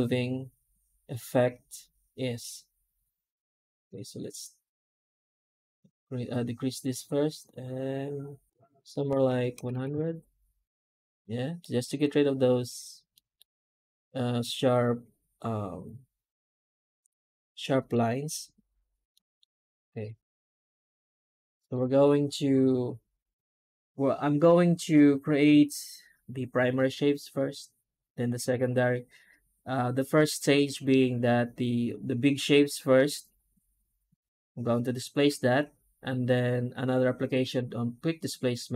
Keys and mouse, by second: 10.9-11.4 middle drag, 13.0 middle drag, 14.7 middle drag, 15.1 middle click, 15.1-17.2 middle drag, 17.5 shift+middle drag, 19.0 middle click, 19.8 F9.